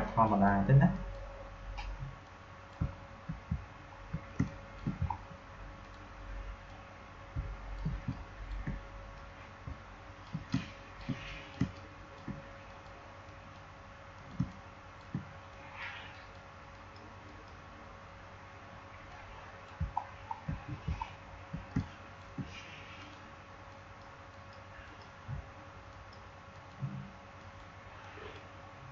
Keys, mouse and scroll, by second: 0.2 click, 2.9 alt+scroll down 1, 3.6-4.0 alt+scroll up 3, 4.2 space, 4.4 click, 4.7 space, 5.0 alt+scroll up 1, 5.7-8.0 drag, 8.0 click, 8.4 space, 9.0-10.4 drag, 10.5 click, 10.8 space, 11.2 click, 11.4 space, 11.6 click, 11.9 space, 12.6 click, 14.3 space, 14.4 click, 15.0 space, 15.4 click, 15.4 click, 19.9 alt+scroll down 1, 20.9 alt+scroll up 1, 21.6 click, 22.2 space, 22.9 click.